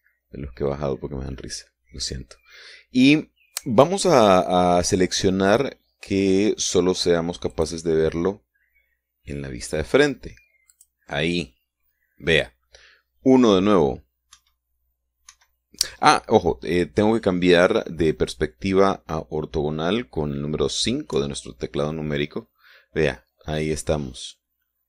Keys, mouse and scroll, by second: 2.0 scroll down 2, 8.4 click, 11.6 click, 15.2 KP_1, 16.2 KP_1, 22.0 KP_5.